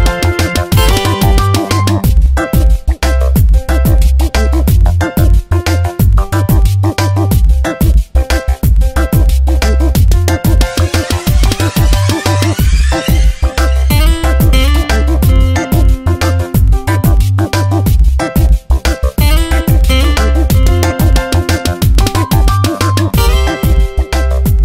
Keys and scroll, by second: 3.0 ctrl+z, 5.7 space, 8.8 space, 10.8 space, 12.9 space, 15.0 space, 16.8 space, 21.3 space, 23.5 space.